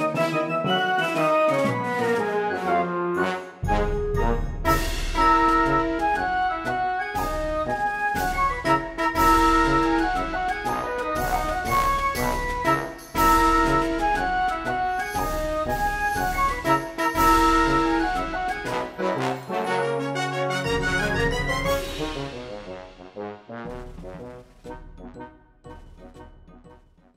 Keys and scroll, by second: 0.0-2.1 typing, 0.4 ctrl+z, 1.9 ctrl+z, 2.6 ctrl+z, 3.1 ctrl+z, 3.2-8.6 typing, 3.6 ctrl+z, 5.6 ctrl+z, 9.6 ctrl+z, 10.2 ctrl+z, 10.5 ctrl+z, 11.1 ctrl+z, 11.4 space, 11.7 b, 12.8 space, 13.7 ctrl+z, 14.1-16.0 typing, 16.6 ctrl+z, 18.3 b, 18.4 space, 19.2 e.